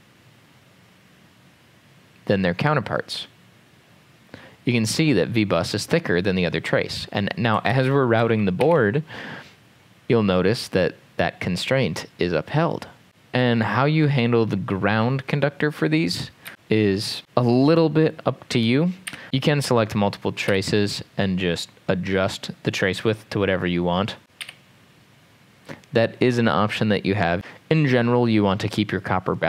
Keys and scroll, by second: 7.8 ctrl+z, 8.6 ctrl+z, 16.5 Escape, 19.1 typing, 19.2 Return, 20.5 e, 24.4 e, 27.4 Return.